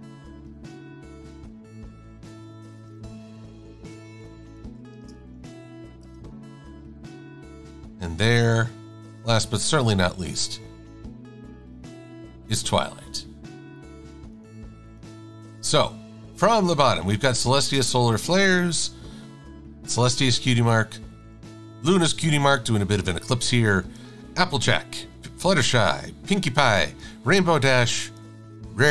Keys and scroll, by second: 4.5-6.3 typing.